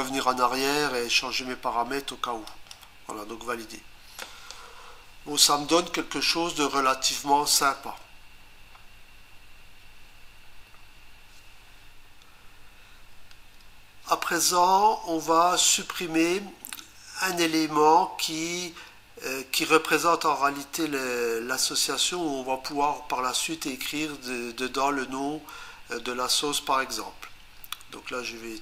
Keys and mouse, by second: 2.5 click.